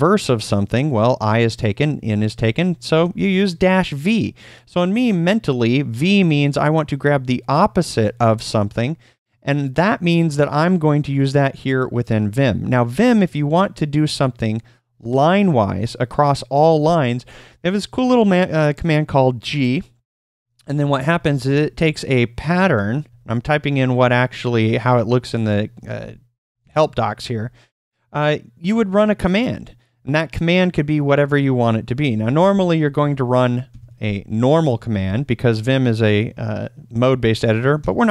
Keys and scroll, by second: 2.8 v, 19.4-21.3 typing, 22.4-27.3 typing, 32.7-34.7 typing, 37.8 ctrl+u.